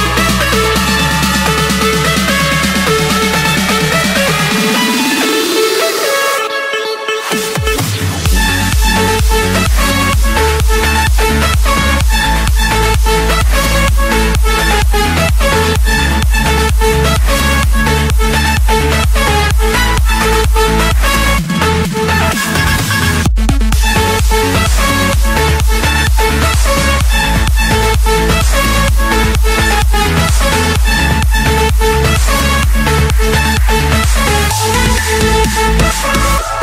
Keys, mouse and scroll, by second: 0.6-1.4 typing, 1.9 Return, 3.3-4.4 drag, 4.0 Return, 5.0-6.1 drag, 6.3-7.3 drag, 8.3-9.4 middle drag, 10.6-12.2 middle drag, 11.1 ctrl+1, 13.4-14.5 drag, 14.8-15.5 typing, 15.8 Return, 19.0-20.1 drag, 20.1-21.2 middle drag, 20.1-20.7 scroll, 20.7 Escape, 22.0-23.1 drag, 25.7 click, 25.9-26.7 scroll down 8, 26.9-27.4 scroll down 3, 27.4-28.9 scroll up 12, 28.9-29.4 scroll down 1, 29.4 scroll down 1, 29.6-31.0 scroll, 33.4 click, 33.7-34.4 scroll down 2, 34.4 scroll down 3, 35.8 click, 36.2-36.6 scroll up 8.